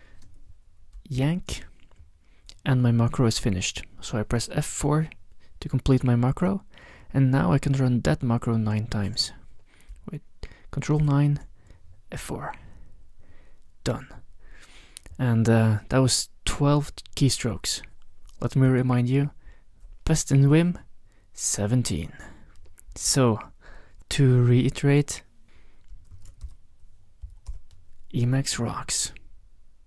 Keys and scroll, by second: 1.3 ctrl+y, 4.8 F4, 11.0 ctrl+9, 12.2 F4, 24.7 ctrl+x, 25.1 0, 26.4 ctrl+x, 26.4 b, 27.2 Tab, 27.5 Return.